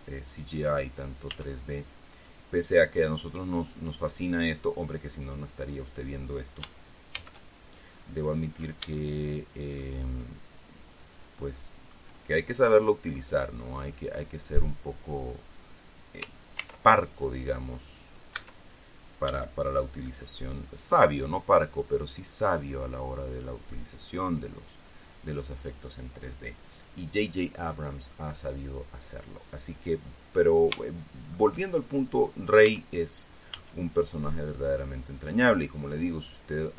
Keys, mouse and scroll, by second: 0.1 a, 1.8 b, 2.1 click, 4.0 click, 4.7-6.6 drag, 7.7 shift+c, 9.5-12.6 shift+drag, 17.1 ctrl+r, 17.8 click, 18.3 click, 18.9 a, 19.8 b, 20.4-22.3 drag, 31.3 shift+middle click, 33.2 a, 34.1 b, 35.3 click.